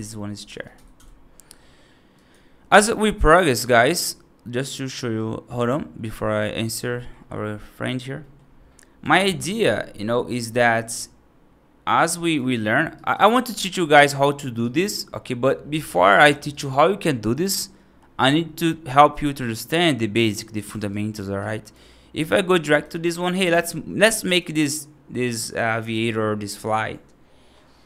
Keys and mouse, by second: 3.2-5.6 drag, 6.5 click, 6.8 middle drag, 8.1 middle drag, 9.0 alt+z, 10.0 middle drag, 10.4 click, 12.2 shift+F1, 12.8-13.4 right drag, 13.4-14.0 middle drag, 14.0 right drag, 14.5 right drag, 14.8-15.3 right drag, 15.6 right drag, 16.0 right drag, 16.4 right drag, 16.9 right drag, 19.7-20.1 right drag, 20.4 right drag, 20.8 right drag, 21.3-21.6 right drag, 22.5 right drag, 23.5-23.9 middle drag, 24.1 right drag.